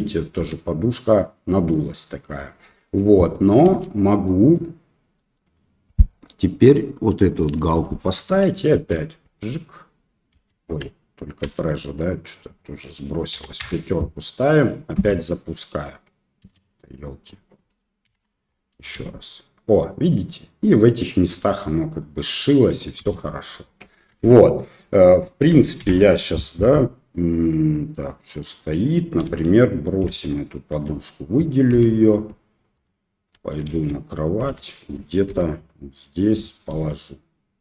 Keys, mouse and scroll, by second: 0.4 space, 0.7-1.7 middle drag, 3.7 ctrl+z, 4.3 middle click, 5.2 middle click, 7.3 click, 8.1 middle click, 8.7 space, 10.4 space, 11.5 ctrl+z, 12.5-14.1 drag, 14.4 middle click, 15.0 space, 16.4 space, 17.3 click, 18.1 shift+Left, 18.8 space, 20.9-21.5 middle drag, 22.1-22.5 middle drag, 23.1 space, 24.2 ctrl+z, 25.8 shift+Left, 28.6 middle click, 29.3 KP_1, 30.3-30.8 shift+middle drag, 31.7 g, 33.3 KP_1, 33.7 KP_3, 34.6 shift+middle click, 35.3 g, 36.7 r.